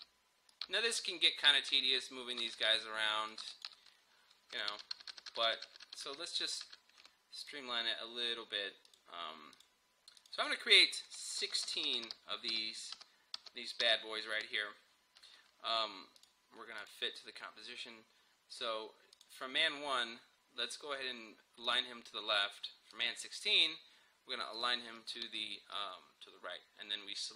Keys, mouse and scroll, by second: 4.7 ctrl+z, 7.5 click, 11.4 ctrl+d, 15.3 scroll down 1, 16.2 click, 19.2 click, 21.7 click.